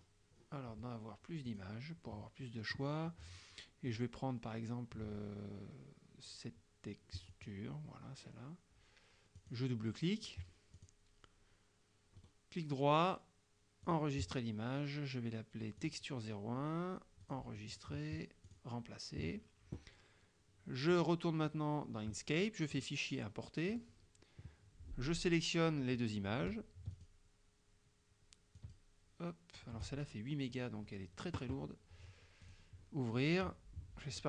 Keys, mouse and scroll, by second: 0.0-0.7 scroll up 2, 1.6 click, 7.3 click, 9.5 click, 10.8 click, 12.3 right click, 13.9 click, 15.8 click, 17.3 click, 18.6 click, 21.0 click, 22.8 click, 23.8 click, 25.2 click, 27.0 shift+click, 28.6 shift+click, 32.5 click.